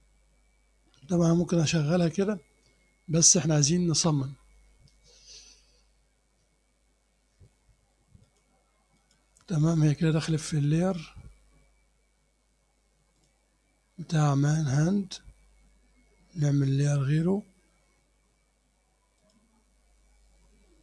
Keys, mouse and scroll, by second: 5.1 scroll up 1, 8.3 click, 9.0 click, 9.5 click, 10.2 click, 13.2 click, 19.3 click.